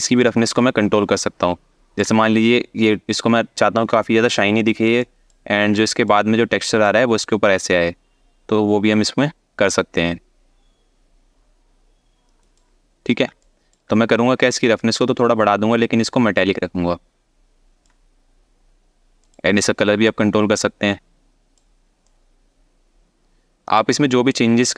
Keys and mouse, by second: 0.0-1.6 ctrl+drag, 4.7 alt+shift+middle click, 5.6 alt+shift+middle click, 6.5 shift+click, 13.0-13.4 alt+shift+middle drag, 14.4-17.5 ctrl+drag, 18.9 click.